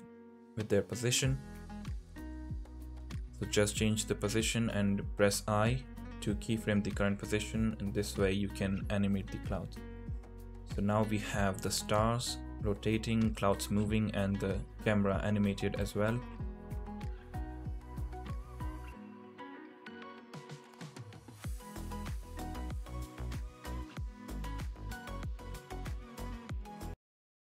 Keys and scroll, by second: 6.2 g, 8.4 i.